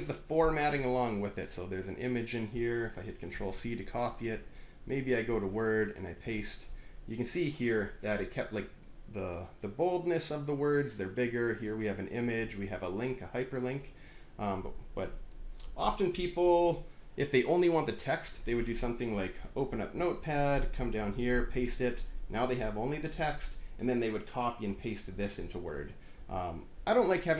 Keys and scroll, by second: 3.2 ctrl+c, 6.2 ctrl+v, 20.6 Return, 20.8 Return, 20.9 Return, 21.2 ctrl+v, 25.5 ctrl+z.